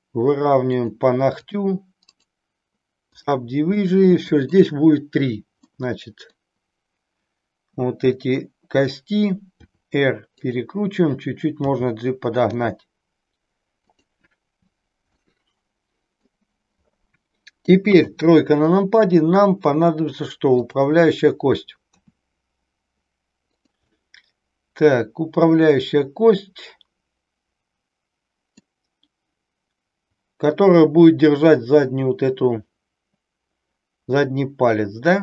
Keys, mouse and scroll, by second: 0.7 click, 1.4 click, 2.1-3.4 right drag, 3.9 middle click, 5.6 middle click, 9.6 r, 10.4 click, 11.6 g, 13.9 click, 15.1-16.4 middle drag, 17.8 KP_3, 20.6 click, 21.9 e, 23.6 click, 23.9-28.6 middle drag.